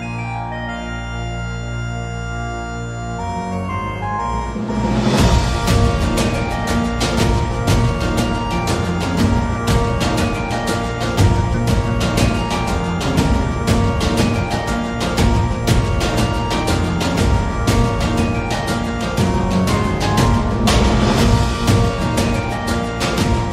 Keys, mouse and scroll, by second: 2.5 middle click, 2.5 1, 5.7 Tab, 6.1 middle click, 6.5 shift+middle click, 7.2 Tab, 8.5 ctrl+b, 10.3 Tab, 10.3 a, 10.4 a, 10.6 click, 10.6 middle click, 11.2 middle click, 12.8 x, 13.4 middle click, 14.3 click, 14.5 middle click, 15.2 shift+d, 19.2 middle click, 20.2-23.3 middle drag.